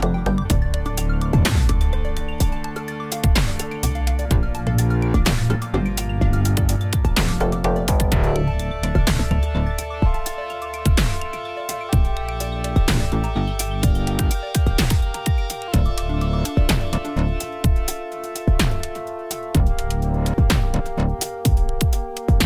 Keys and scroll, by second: 9.7 alt+a, 10.8 shift+a, 14.3 s.